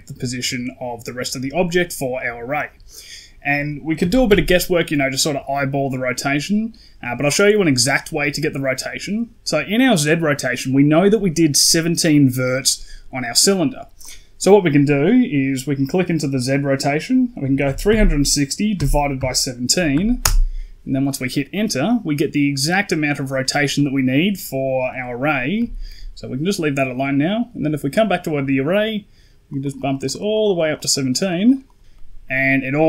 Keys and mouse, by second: 3.9 r, 14.1-20.1 drag, 25.4 n, 26.8 right click, 29.4 click, 29.5 click, 29.6 click, 29.8 click, 29.9 click, 30.0 click, 30.2 click, 30.3 click, 30.5 click, 30.6 click, 30.8 click, 31.0 click, 31.1 click, 31.3 click, 31.6 click, 31.8 middle drag, 32.4 middle click.